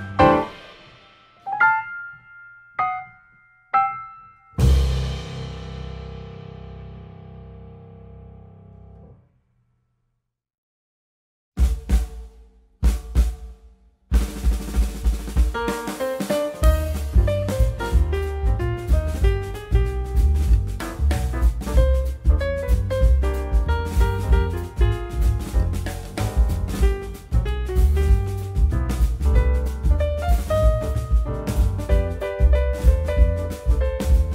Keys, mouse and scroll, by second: 0.1 scroll up 1, 0.3 click, 0.9 shift+click, 1.3 click, 2.4 shift+g, 3.4 shift+click, 4.3 shift+d, 8.7 g, 9.9 s, 12.8 x, 13.5 click, 14.9 shift+g, 15.8 shift+click, 16.6 shift+d, 21.3 shift+d, 26.3 y, 26.8 x, 27.7 r, 30.0 r, 33.6 g.